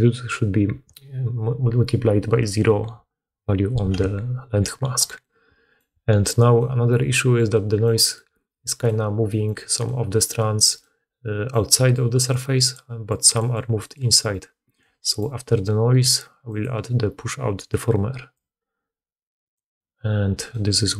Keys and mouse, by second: 8.9-10.8 middle drag, 11.1 middle click, 11.7-14.1 typing.